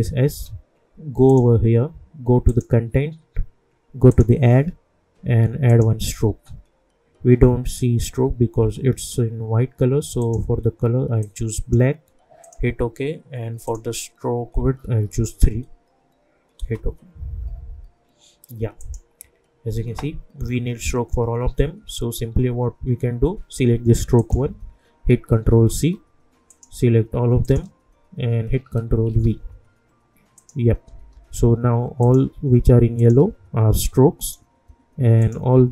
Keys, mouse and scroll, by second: 1.2 click, 10.2 click, 16.6 Return, 18.8 click, 24.1 click, 25.6 ctrl+c, 26.5 click, 27.4 shift+click, 29.0 ctrl+v, 30.3 click, 30.9 u, 32.0 click, 33.0 shift+click, 34.2 click, 35.5 scroll down 1.